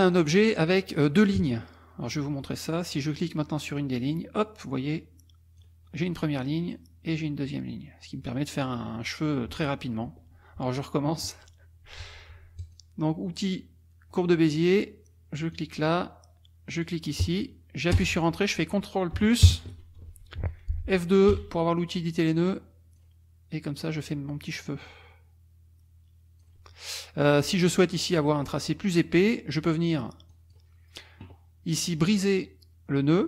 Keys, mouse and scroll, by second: 0.1 click, 3.3-5.8 drag, 6.7-8.8 drag, 12.6 click, 15.5 click, 16.8 click, 18.0 Return, 19.4 ctrl+KP_Add, 21.3 n, 22.2 click, 23.8-26.6 drag, 29.0 middle click, 29.0-29.5 scroll up 1, 30.3 click.